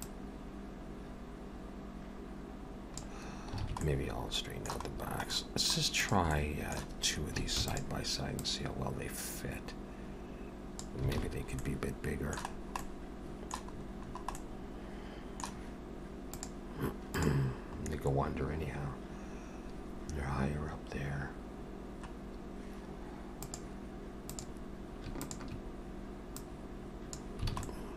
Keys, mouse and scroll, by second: 0.0 click, 3.7 alt+a, 3.9 middle click, 5.0-5.3 scroll down 2, 5.3 middle click, 6.0 click, 6.3 middle click, 7.8 shift+d, 8.4 click, 11.2 alt+a, 11.3-11.6 scroll down 3, 11.6 middle click, 12.5-12.8 scroll down 2, 12.8 middle click, 13.8-14.4 scroll up 6, 14.4 middle click, 24.3 click, 25.2 shift+click, 26.4 click, 27.6 alt+a, 27.7 middle click.